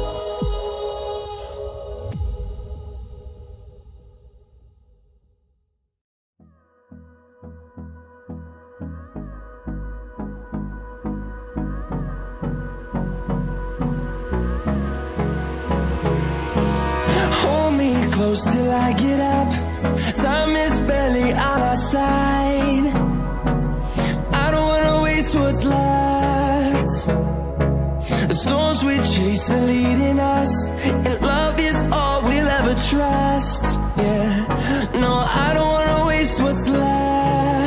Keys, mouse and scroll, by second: 0.4 ctrl+click, 1.8 double click, 3.9 click, 9.4-9.7 scroll up 1, 10.2 click, 11.9 scroll down 1, 13.1 click, 16.2 double click, 17.0-19.2 typing, 20.1 click, 23.9 scroll up 1, 24.6 click, 30.6 scroll down 1, 31.1 click, 35.3-35.8 scroll down 1, 35.8 scroll up 1.